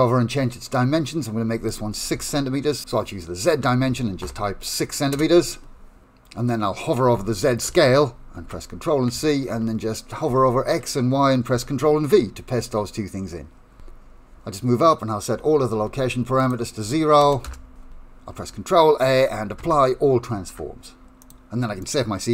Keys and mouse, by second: 1.7-5.9 drag, 7.7 ctrl+c, 10.4 ctrl+v, 11.6 ctrl+v, 13.7 KP_Decimal, 16.6-17.7 drag, 17.9 KP_Decimal, 19.7 ctrl+a, 21.8 middle click.